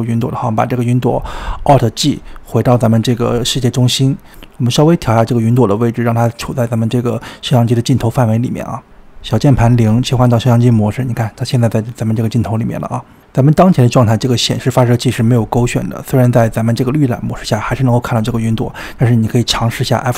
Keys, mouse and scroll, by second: 0.4-1.3 scroll down 6, 1.3-2.2 shift+middle drag, 2.2 click, 3.6 alt+g, 4.6-5.5 scroll up 6, 5.5-7.5 middle drag, 7.5 click, 9.6 click, 10.1-10.6 middle drag, 10.6 KP_0, 11.0-12.0 scroll up 5, 14.3-15.4 drag, 18.4 space, 18.7 space, 19.0 click, 19.4 space, 19.7 space.